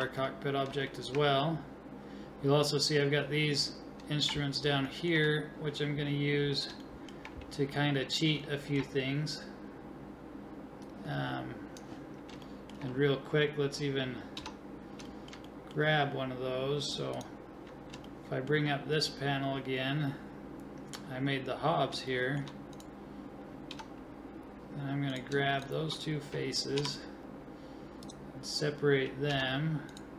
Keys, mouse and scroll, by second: 4.9-10.8 middle drag, 10.8 click, 11.2 click, 12.5-14.4 middle drag, 14.4 Tab, 15.1-17.2 middle drag, 17.6 click, 18.1-20.8 middle drag, 20.8 scroll up 1, 20.8-22.8 middle drag, 22.8-24.1 drag, 23.7 right click, 23.7 Tab, 24.1 right click, 24.2 click, 24.3 scroll up 1, 24.4-27.2 drag, 26.8 p, 27.2 right click, 27.5 click, 29.3 Tab, 29.9 right click.